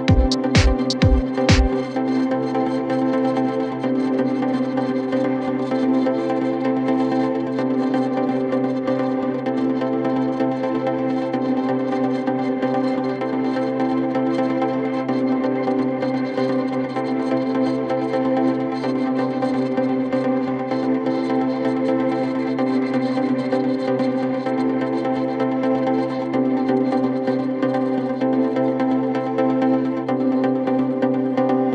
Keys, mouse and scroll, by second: 0.9 Tab, 1.3 click, 1.6 scroll down 5, 1.8-3.6 shift+middle drag, 3.6 click, 4.0 Tab, 4.5-5.5 shift+middle drag, 5.5 alt+click, 6.0 g, 11.4 s, 12.8 g, 13.7 Tab, 14.3 click, 14.6 scroll down 3, 14.8 shift+middle click, 15.0-15.4 scroll up 2, 15.6 click, 15.9-16.5 scroll up 1, 16.5 Tab, 17.5 alt+click, 17.9 s, 20.0 r, 21.2 s, 23.4 Tab, 24.1 Tab, 24.5 s, 25.8 s, 27.1 alt+click, 27.5 s, 28.9 Tab, 29.4 Tab, 29.6 g, 30.4 Tab, 31.1 Tab.